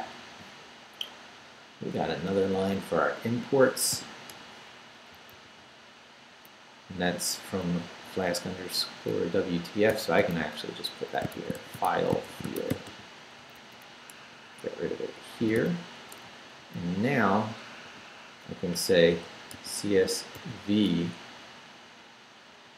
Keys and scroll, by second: 2.2 Up, 3.9 i, 4.3 Return, 5.0 Up, 5.3 super+v, 7.6 Up, 8.1 Up, 9.9 ,, 11.1-13.4 typing, 14.5 Escape, 15.4 d, 16.0 Down, 17.8 o, 19.1 c, 19.5 s, 20.4 v.